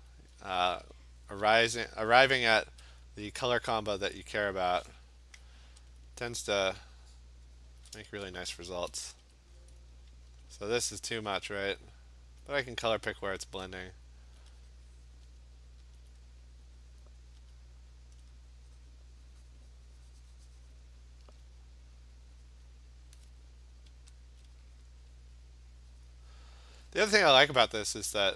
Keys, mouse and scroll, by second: 0.0 alt+click, 0.4 click, 0.8 alt+click, 1.3 click, 1.9 click, 2.4 alt+click, 2.4 [, 4.6 click, 6.0 alt+click, 6.1 alt+click, 7.2 click, 7.8 alt+click, 8.2 Return, 9.1 Return, 9.3 Return, 9.8 click, 9.8 ], 10.0 click, 10.1 alt+click, 10.3 ], 10.6 ], 11.0 click, 11.2 click, 11.5 click, 12.2 alt+click, 12.5 Return, 12.5 alt+click, 13.2 click, 13.6 click, 14.4 alt+click, 15.3 click, 16.0 alt+click, 17.1 click, 17.6 alt+click, 18.2 alt+click, 20.8 click, 22.7 click, 24.3 alt+click, 24.9 click, 26.1 click, 27.9 click.